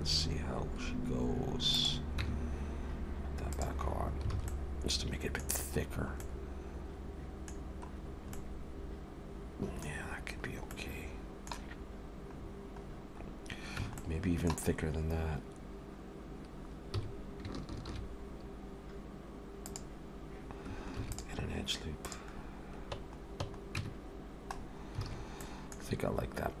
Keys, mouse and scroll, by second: 2.2 Tab, 3.5 click, 4.0-4.3 scroll down 3, 4.3 alt+a, 4.5 middle click, 5.5-5.9 scroll down 2, 6.2 middle click, 6.2 scroll down 2, 7.6-7.9 scroll down 4, 8.3 middle click, 8.3 scroll down 1, 9.9-10.2 scroll down 3, 10.7 middle click, 11.9-13.5 scroll up 11, 13.8 Tab, 13.8 scroll up 1, 14.0 middle click, 14.7-15.3 scroll up 2, 16.9 s, 21.0 ctrl+r, 22.4 scroll down 1, 23.8 Tab, 23.8-24.6 scroll down 4, 24.6-25.1 scroll down 3, 25.1 alt+a, 25.4 middle click, 25.8-26.4 scroll down 4.